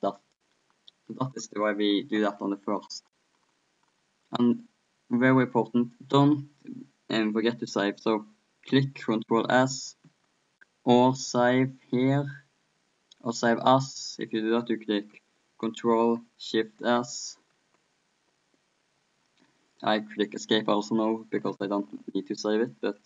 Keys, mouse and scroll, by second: 0.0-1.4 middle drag, 5.5 middle click, 10.2 ctrl+Escape, 17.6 ctrl+Escape.